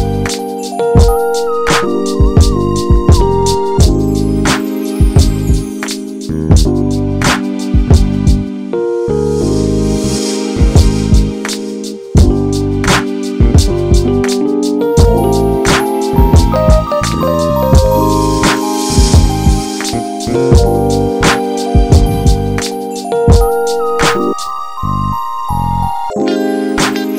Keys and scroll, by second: 0.5 ctrl+z, 1.8 ctrl+z, 6.6 ctrl+z, 8.4 ctrl+z.